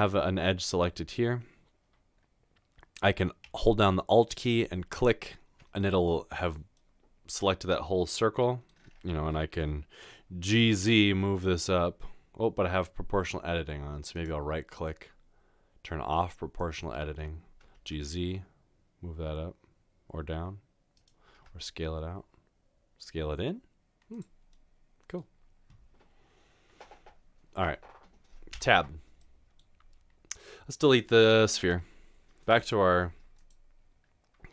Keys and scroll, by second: 10.7 typing, 17.8 typing, 21.3 typing, 28.6 Tab, 31.6 Delete.